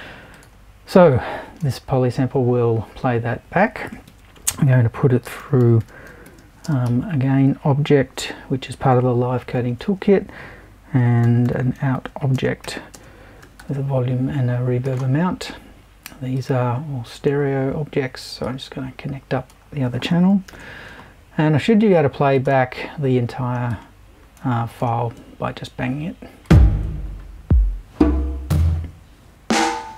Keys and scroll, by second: 4.1 super+i, 5.0-6.9 typing, 9.4 super+i, 10.7-14.1 typing, 20.5 shift+super+b.